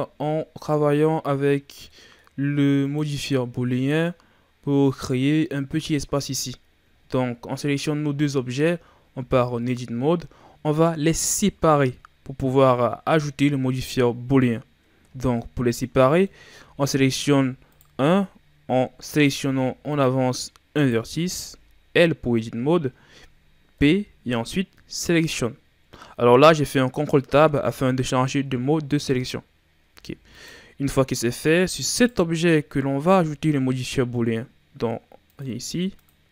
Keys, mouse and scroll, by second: 0.2-0.8 scroll up 3, 0.8-2.8 middle drag, 2.8 right click, 3.3-4.1 middle drag, 4.1-6.4 scroll up 2, 6.4-6.9 scroll down 1, 6.9-7.4 shift+scroll up 2, 7.4 scroll down 2, 8.4-9.0 shift+scroll up 2, 9.0 Tab, 15.9 middle click, 16.5 a, 16.8 a, 17.6 right click, 19.1 ctrl+Tab, 20.7 right click, 21.9 l, 23.7 p, 27.4 ctrl+Tab, 29.8 Tab, 30.3 right click, 31.8 right click, 35.2-35.9 drag.